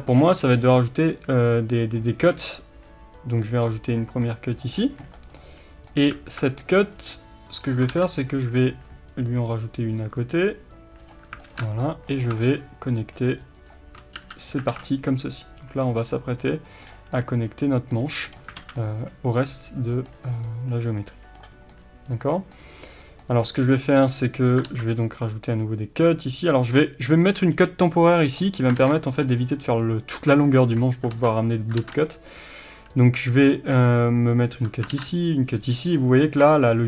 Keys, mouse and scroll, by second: 4.6 click, 4.7-5.1 scroll down 1, 5.4-11.1 middle drag, 7.0 scroll down 1, 7.9 ctrl+r, 11.1 click, 11.5 alt+z, 11.6 middle click, 12.2 click, 14.1 f, 14.5 scroll down 1, 14.7 alt+a, 14.9-28.8 middle drag, 16.9 scroll down 1, 18.2-18.6 scroll up 2, 18.6 alt+a, 24.1-24.6 scroll down 1, 24.6 ctrl+r, 30.9 scroll up 1, 31.1 ctrl+z, 34.6 click, 34.9 ctrl+r, 35.9 click.